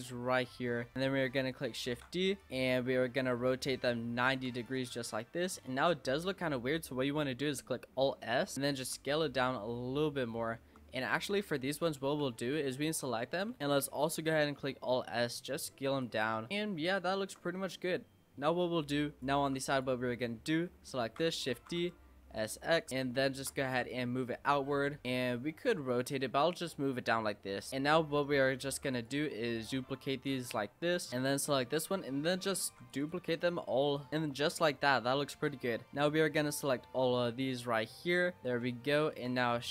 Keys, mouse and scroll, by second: 0.0-1.9 typing, 3.3 r, 5.1-6.4 middle drag, 6.4-7.8 scroll up 2, 7.9 alt+s, 9.0 Tab, 9.1 scroll down 5, 9.3-10.3 middle drag, 10.3-10.6 scroll up 4, 10.6 Tab, 11.3 click, 11.7 l, 12.2 l, 12.6 l, 13.0-13.8 l, 14.7 alt+s, 16.2 Tab, 16.5 middle click, 16.8-17.2 scroll up 4, 17.2 Tab, 18.5 l, 19.0 l, 19.2 click, 19.4 Tab, 19.7 click, 20.1 middle click, 21.0 shift+d, 21.5 s, 23.2 shift+middle click, 23.6 e, 24.5 middle click, 25.0-25.9 scroll up 1, 25.9 click, 27.7 l, 27.9 middle click, 28.7 shift+d, 29.5 click, 30.4 middle click, 31.1 click, 31.7 l, 32.6 shift+d, 33.5 click, 34.1-35.3 middle drag, 35.3-39.7 typing.